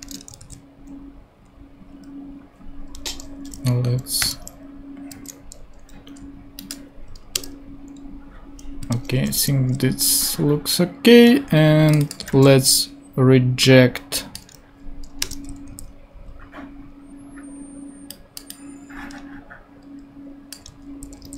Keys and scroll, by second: 0.0 space, 0.4 super+v, 4.2 ctrl+i, 7.3 Return, 9.3 ctrl+i, 12.3 super+c, 15.2 Return, 15.3 super+v, 15.7 super+Tab, 20.7 super+c, 21.2 super+Tab.